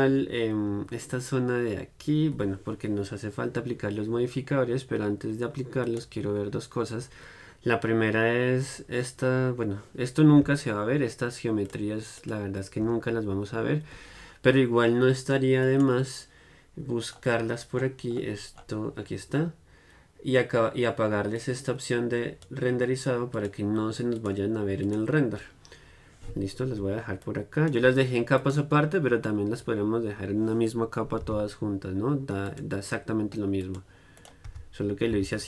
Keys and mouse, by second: 11.8-15.8 drag, 15.8-21.5 right drag, 21.5-26.9 drag, 27.3-34.3 drag, 34.3-35.4 right drag, 34.6 m.